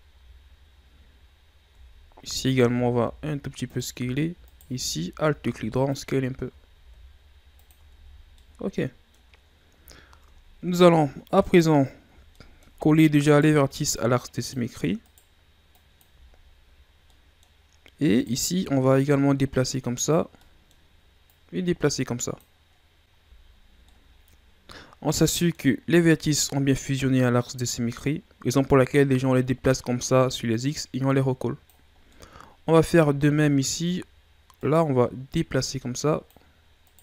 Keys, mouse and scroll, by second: 0.2 a, 1.4 scroll up 1, 1.7 Tab, 2.4 alt+right click, 3.0 s, 4.4 alt+right click, 5.1 s, 6.8 s, 8.0 Tab, 8.1 scroll down 1, 8.4-9.5 middle drag, 9.5-10.5 scroll up 3, 10.5-10.8 ctrl+scroll down 2, 10.8-11.5 scroll up 3, 11.5 right click, 12.2 shift+scroll down 1, 12.4 middle click, 12.8 Tab, 13.3 right click, 14.0-15.1 drag, 15.1 right click, 15.8 click, 16.3-17.1 scroll up 5, 17.1 middle click, 17.8-18.2 scroll up 1, 18.2 right click, 18.9-20.4 drag, 20.4 middle click, 21.3-22.7 drag, 22.7-23.2 scroll down 6, 23.2 ctrl+z, 23.9-25.8 middle drag, 25.8-26.6 scroll up 2, 26.6 scroll up 1, 26.7-29.8 drag, 32.0 scroll down 1, 32.1-33.2 middle drag, 33.2 scroll down 4, 33.4 middle click, 34.0-34.6 scroll up 2, 34.6 right click, 35.3-36.9 drag, 36.9 right click.